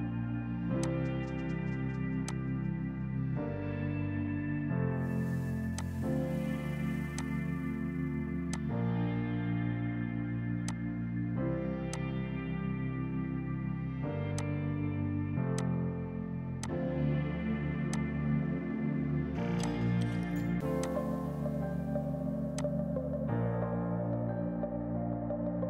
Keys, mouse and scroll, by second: 1.9 Escape, 2.3 click, 16.9 space, 17.4 F3, 17.8 F2, 17.9 click, 18.1 right click, 19.6 click, 25.5 ctrl+right click.